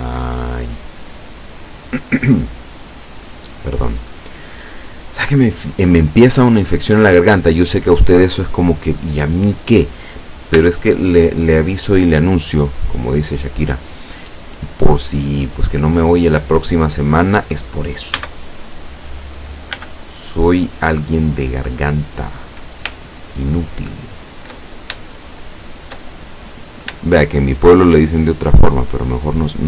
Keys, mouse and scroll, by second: 1.7 click, 2.1-3.9 middle drag, 4.0 scroll down 1, 5.1 scroll up 1, 6.4-6.8 scroll up 1, 10.6 l, 16.3-16.9 scroll up 2, 18.3 a, 19.8 b, 20.4 click, 23.1 shift+right click, 23.9 shift+right click, 24.7-25.1 shift+scroll up 1, 25.1-27.0 shift+middle drag, 27.4 shift+right click, 27.8 shift+right click, 28.3 shift+right click.